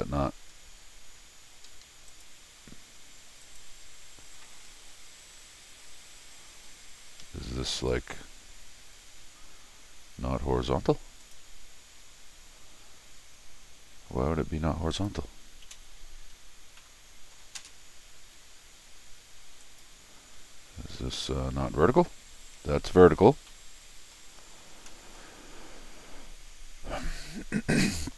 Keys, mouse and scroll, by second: 0.3-0.8 scroll down 4, 0.8-1.2 scroll up 4, 1.4 Escape, 1.7 Escape, 1.8 Escape, 2.1 click, 3.4 click, 4.6 scroll down 4, 7.2 Escape, 7.7 click, 11.2 click, 13.4-14.9 scroll down 4, 14.9 click, 16.8 middle click, 17.6 space, 19.6 click, 23.5 middle click, 23.8-24.5 scroll down 2, 24.7 scroll up 1, 24.9 scroll down 1, 25.1 middle click, 26.5 scroll down 1, 27.7 scroll down 1.